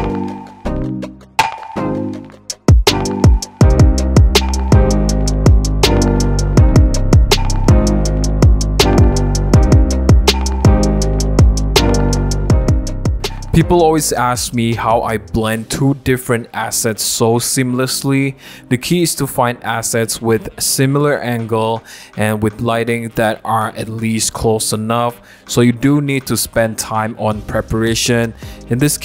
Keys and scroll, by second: 0.0 super+c, 0.0 super+d, 0.1 super+t, 0.5 super+t, 0.9 Return, 1.0 super+a, 1.1 super+d, 1.5 super+j, 1.6-2.9 typing, 3.1 super+=, 3.2 super+=, 5.3 super+=, 5.4 shift+l, 5.5 shift+l, 7.0 l, 9.1 shift+l, 11.5 super+z, 11.8 super+0, 12.6 v, 12.6 super+a, 12.8 super+c, 12.8 super+d, 12.8 v, 12.9 super+t, 16.7 super+z, 21.7 super+t.